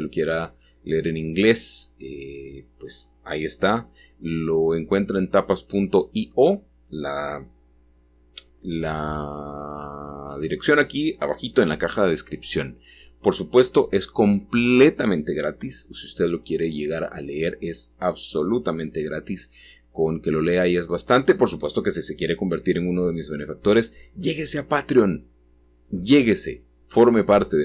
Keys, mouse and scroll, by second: 0.9-5.5 scroll up 1, 8.1 s, 10.3 click, 11.7 7, 13.1-15.4 scroll up 1, 15.4-19.9 scroll down 1, 22.7 g, 24.1 t, 26.1 y.